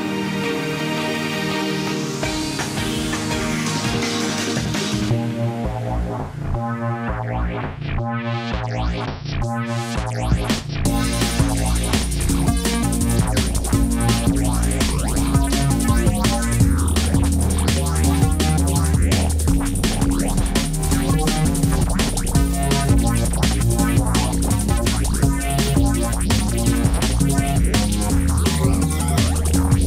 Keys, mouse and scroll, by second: 5.7 ctrl+t, 25.5 ctrl+t.